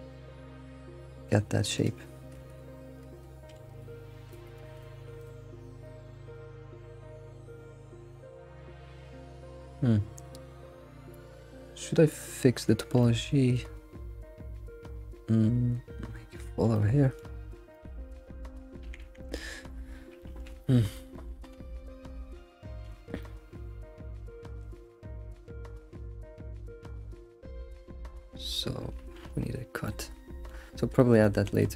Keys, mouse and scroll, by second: 0.0 click, 0.6 click, 1.2 g, 2.4 alt+x, 3.9 alt+x, 4.7 alt+x, 5.2 shift+click, 5.8 click, 6.3 shift+click, 7.0 alt+x, 11.1 scroll, 11.8 alt+x, 12.1 middle click, 12.7-13.5 shift+middle drag, 14.8-16.0 middle drag, 16.7 middle click, 17.7 click, 19.5 scroll down 2, 19.7 middle click, 20.6 middle click, 21.1 alt+middle click, 21.6 alt+x, 23.2-26.1 shift+middle drag, 26.1-26.9 scroll up 1, 29.2 alt+x, 29.6 scroll down 1, 29.8 middle click, 30.7-31.0 scroll down 3, 31.0-31.7 shift+middle drag.